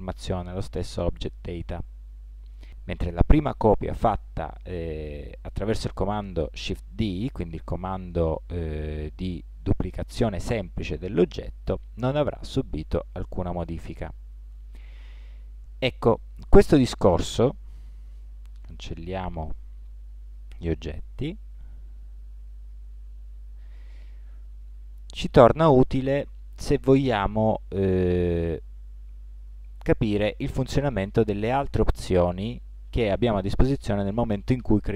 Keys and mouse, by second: 19.5 x, 21.9 x.